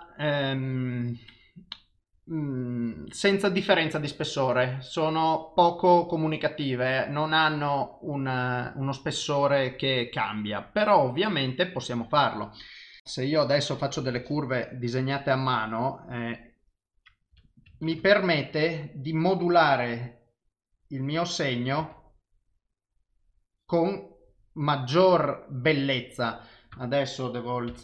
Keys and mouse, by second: 13.0 click, 17.3 f, 19.6 click, 21.8 ctrl+z, 22.4 click, 26.8 ctrl+z, 27.7 f.